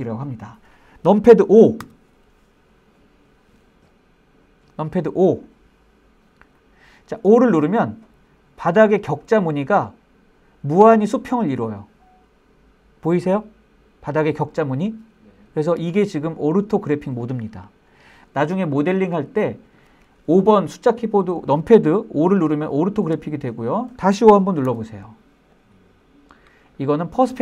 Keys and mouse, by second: 2.0 KP_5, 7.9-19.8 middle drag, 22.8-23.3 shift+middle drag, 23.4 middle click, 24.8 KP_5, 25.7-26.5 middle drag, 27.0-27.4 middle drag.